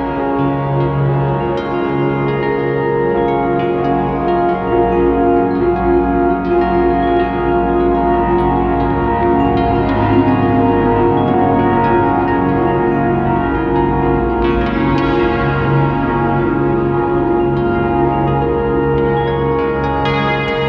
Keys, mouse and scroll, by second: 0.4 ctrl+t, 1.2 click, 4.7 scroll down 1, 5.6 KP_0, 6.7 click, 7.3 Delete, 7.7 click, 7.9 ctrl+t, 8.3 click, 9.0 scroll up 1, 9.8 alt+a, 10.5 g, 11.1 click, 11.5 g, 11.9 click, 12.3 g, 12.8 click, 13.1 click, 13.1 g, 13.3 click, 13.9 scroll down 1, 15.1 KP_0, 16.9 click.